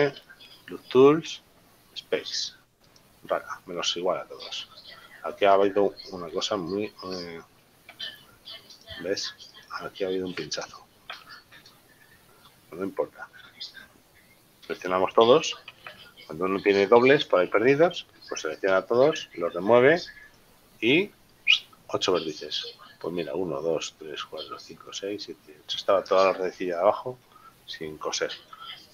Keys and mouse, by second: 3.3 click, 5.7 right click, 8.7 g, 9.1 click, 9.7 right click, 11.3 ctrl+z, 13.7 middle click, 15.8 a, 20.4 click, 26.8 middle click, 28.7 shift+middle click.